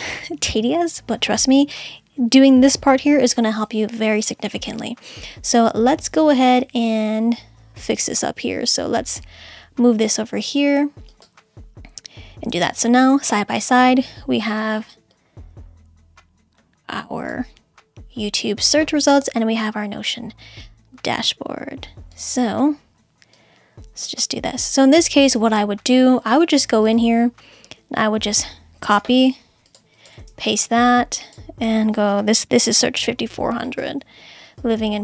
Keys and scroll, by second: 29.0 super+c, 30.2 super+v, 32.2-33.4 typing.